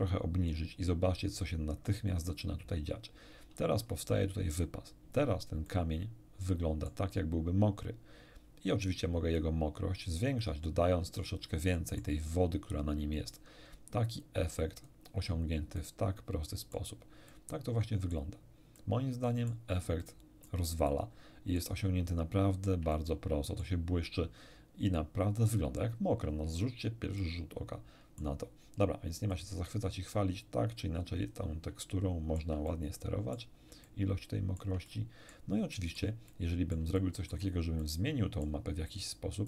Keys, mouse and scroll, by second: 3.6 scroll down 2, 5.7-7.1 middle drag, 9.3-10.7 drag, 11.1-12.2 shift+middle drag, 14.1-15.1 drag, 15.7-16.9 middle drag, 17.3-18.3 middle drag, 18.7 middle click, 20.0 middle click, 20.9 middle click, 22.1 shift+middle click, 23.1 shift+middle click, 25.4 scroll up 1, 27.2-28.4 middle drag, 29.3-31.5 drag, 31.8 shift+middle click, 32.7 shift+middle click, 33.9-35.5 shift+middle drag, 35.7 shift+middle click, 36.3-37.5 shift+middle drag, 37.8 shift+middle click.